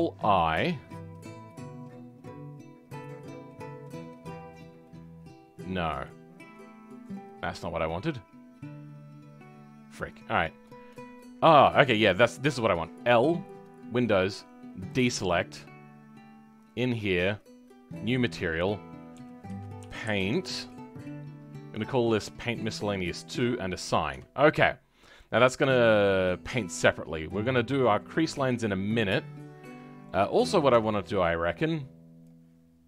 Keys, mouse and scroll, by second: 10.6 click, 16.7-23.7 drag, 23.7-24.1 scroll down 6, 24.1 Tab, 24.4-26.1 middle drag, 26.1-26.4 scroll down 4, 26.4 middle click, 26.9-27.4 scroll up 6, 27.4-28.1 scroll down 11, 28.1-29.2 middle drag, 29.2-29.6 scroll up 2, 29.6-30.7 middle drag, 30.7 Tab, 30.9-32.2 middle drag, 32.2 click.